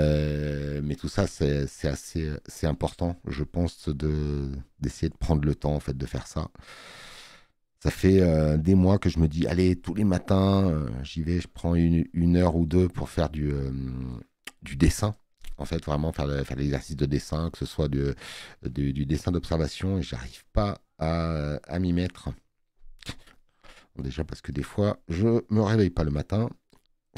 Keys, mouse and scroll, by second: 2.6 space, 2.8 click, 17.0 space, 17.2 click, 24.0 click.